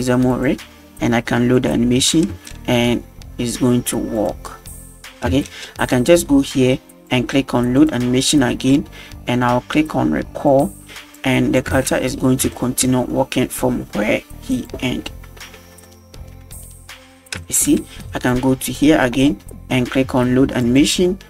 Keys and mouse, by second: 1.6 click, 2.3 space, 4.2 click, 5.3 space, 5.4 middle click, 6.2 click, 7.8 click, 10.5 click, 11.2 click, 11.7 space, 12.0 middle drag, 12.5 shift+middle drag, 14.6 click, 15.1 middle drag, 15.9 shift+middle drag, 17.4 space, 17.4 middle drag, 18.3 click, 20.6-21.0 drag.